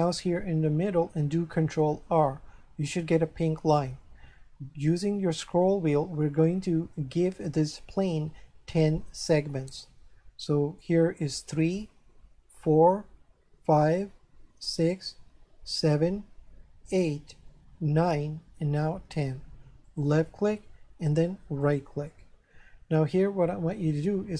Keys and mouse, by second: 2.0 ctrl+r, 19.9 click, 21.6 right click.